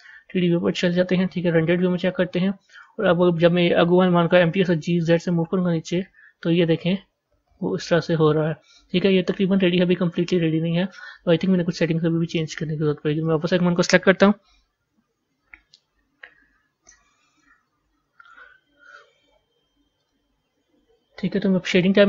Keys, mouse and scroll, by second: 0.0-1.7 drag, 1.7 z, 2.8 click, 4.5 g, 13.2 click.